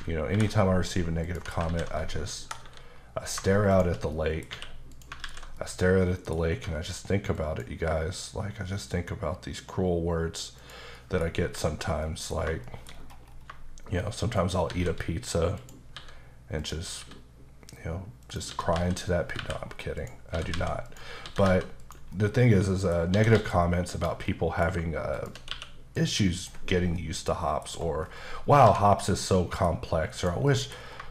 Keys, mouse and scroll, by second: 0.3 ctrl+b, 1.2 click, 1.3 Tab, 1.6 alt+z, 2.6 KP_7, 3.7 shift+click, 3.9 click, 4.1 middle click, 4.5 q, 4.9 click, 5.2 alt+z, 5.6 middle click, 6.5 q, 7.4 click, 10.6 click, 10.9 middle click, 11.3 scroll up 1, 11.4 h, 11.8 scroll down 1, 12.0 middle click, 12.4 scroll up 1, 12.6 shift+middle click, 12.9-13.5 scroll up 5, 14.4 shift+right click, 14.7 shift+a, 15.6 click, 15.9 s, 16.6 click, 17.0 s, 18.2 click, 18.5 typing, 19.9 click, 20.5-21.4 typing, 20.8 click, 21.8 click, 22.1 middle click, 23.1 typing, 23.9 click, 24.2 middle click, 25.1 shift+click, 25.5 q, 25.9 click, 26.9 middle click, 27.7-28.4 scroll down 3, 28.6 h, 28.8 middle click, 30.4 middle click, 30.8-31.1 scroll up 3.